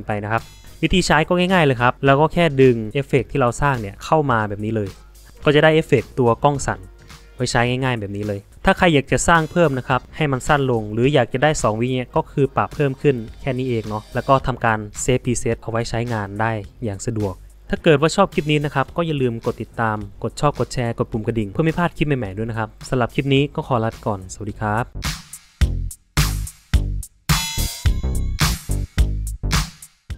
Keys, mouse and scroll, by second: 14.1 click.